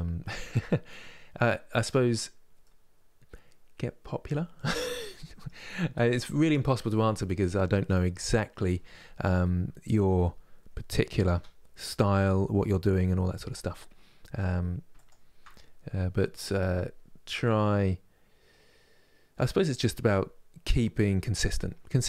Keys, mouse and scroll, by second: 1.8 scroll up 2, 2.3-8.4 middle drag, 9.1-11.0 middle drag, 11.0 KP_7, 14.6-17.6 shift+right drag.